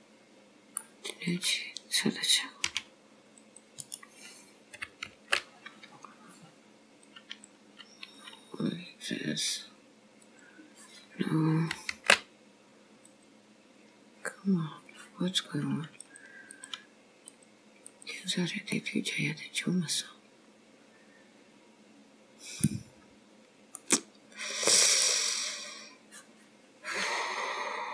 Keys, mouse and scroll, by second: 1.3 click, 2.8 c, 5.1 alt+m, 9.5 click, 12.0 alt+m, 16.0 click, 17.3 click, 18.8 middle click, 23.1 scroll down 2, 23.9 middle click.